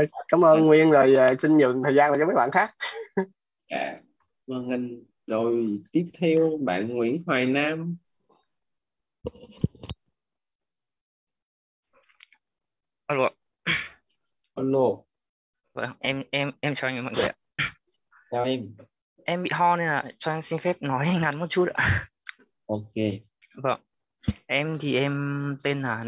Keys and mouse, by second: 6.2 click, 8.4 click, 11.2 ,, 13.8 space, 20.9 click.